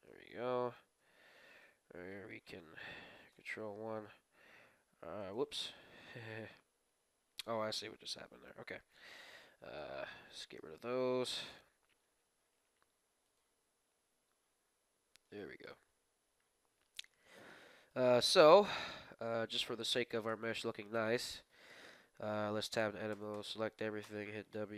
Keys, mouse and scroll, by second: 1.0 Tab, 1.4-2.6 drag, 3.2 Tab, 3.2 middle click, 3.2 ctrl+KP_1, 4.2 r, 6.4 middle click, 7.5 ctrl+z, 8.0 ctrl+z, 9.5 b, 10.9-12.8 middle drag, 12.0 r, 13.7 g, 16.3 Tab, 16.6-22.2 middle drag, 18.2 Tab, 20.3 Tab, 22.3 Tab, 23.1 a, 23.4 a, 24.0 w.